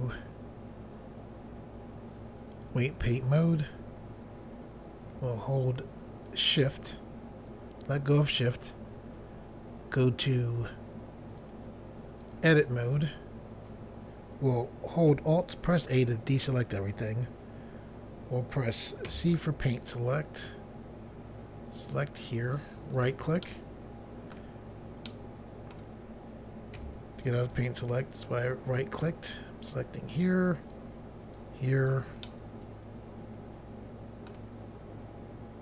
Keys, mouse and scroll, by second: 2.5 click, 6.3 shift+click, 11.4 click, 12.2 click, 15.7 alt+a, 19.1 c, 19.9 click, 23.0 right click, 23.5 middle click, 25.1 middle click, 26.8 c, 27.6 click, 30.8 click, 31.8 right click, 32.3 middle click.